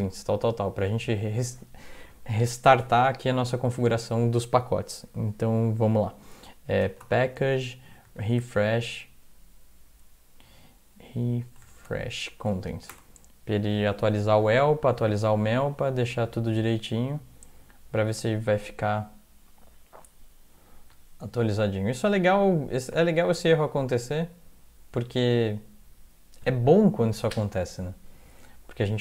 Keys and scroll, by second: 3.8 alt+a, 6.6-8.6 typing, 11.3-11.6 typing, 11.9 Tab, 12.9 Return.